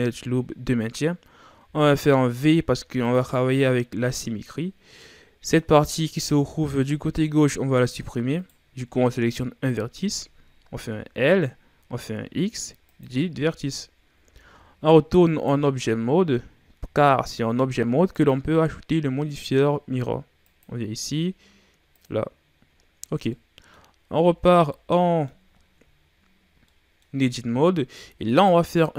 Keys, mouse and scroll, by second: 1.6 v, 4.0-7.0 middle drag, 8.3 right click, 9.3-10.6 scroll up 2, 10.6 l, 11.8 x, 14.1 Tab, 15.2 right click, 18.1 click, 22.0-22.8 drag, 22.8-23.2 scroll down 2, 23.2-24.1 middle drag, 24.1 Tab, 24.6 middle click, 25.5-26.1 scroll down 3, 26.1-26.6 scroll up 3, 26.6-28.2 middle drag, 28.2 alt+right click.